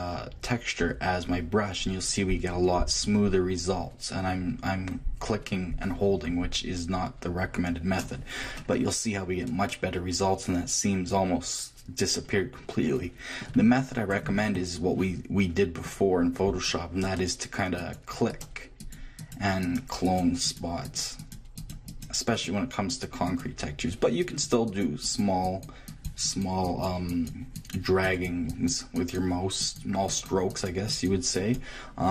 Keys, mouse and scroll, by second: 8.5-10.6 middle drag, 13.5 click, 15.6 click, 17.8-32.1 drag.